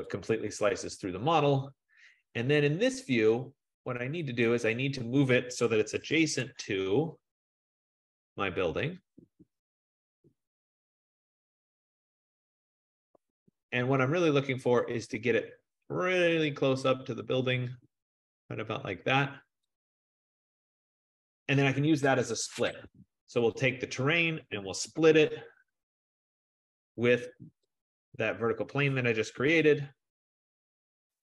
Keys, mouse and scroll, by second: 0.2 click, 2.5-4.2 scroll, 5.6-6.7 typing, 8.3 click, 11.1 click, 11.3-12.3 scroll, 13.0-14.9 typing, 14.9 click, 16.7-17.4 typing, 19.9 click, 20.7-22.9 scroll, 22.9 Escape, 23.9 click, 24.7-27.4 typing, 27.9 click, 29.4 Return.